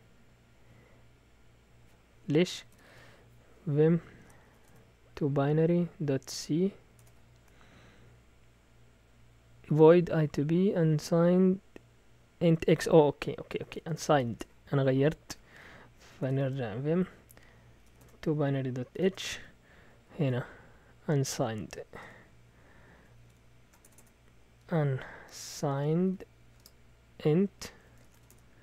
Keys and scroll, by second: 2.4-5.0 typing, 6.1-6.8 typing, 7.0 Return, 13.5 Escape, 13.6-14.5 typing, 15.9-26.6 typing, 19.8 Down, 27.8-28.5 typing.